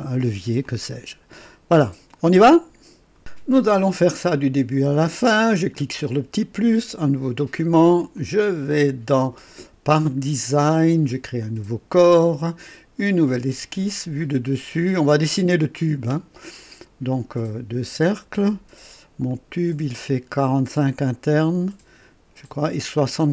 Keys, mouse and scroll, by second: 0.6-1.9 drag, 3.1 right click, 5.7 click, 10.2 click, 11.4 click, 13.0 click, 14.2 click, 15.3 click, 17.4 click, 19.3 click, 20.6 click, 22.4 click.